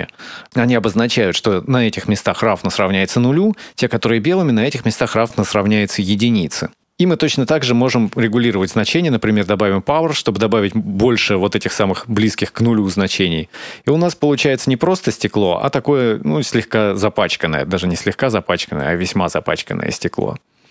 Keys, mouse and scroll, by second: 0.4 middle click, 4.7 middle click, 5.9 middle click, 6.8 middle click, 6.8 scroll down 4, 7.7 click, 7.8 shift+d, 8.6 middle click, 9.8 scroll up 1, 11.7-12.4 scroll up 2, 12.4 scroll down 1, 12.5 scroll down 1, 13.0 middle click, 18.7-19.4 scroll down 4, 19.3 shift+scroll up 1, 19.4 shift+middle click, 19.9-20.7 scroll up 5.